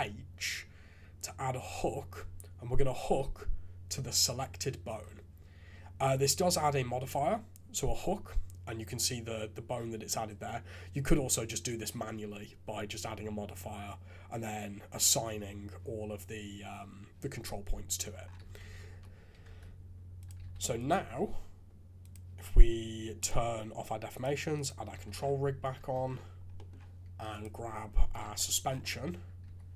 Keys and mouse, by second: 18.4 shift+z, 18.9 KP_3, 19.4 ctrl+Tab, 20.4 alt+a, 24.1 click, 24.5 click, 25.0 shift+z, 25.8 ctrl+Tab, 26.5 click, 27.9 KP_3, 28.2 shift+z, 29.4 g.